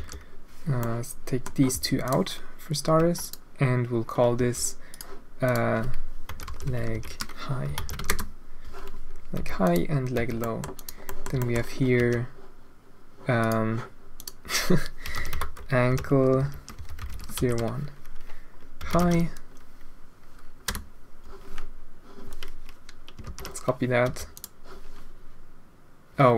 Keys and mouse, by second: 1.0 click, 1.7 p, 2.9 Tab, 3.2 click, 4.3 g, 5.4-8.6 drag, 9.3 h, 9.6 click, 10.1 h, 10.3 drag, 10.7 click, 11.0 middle drag, 11.4 shift+middle drag, 12.1 g, 14.1-21.2 middle drag, 23.2 ctrl+c, 24.0 h, 24.3 middle click.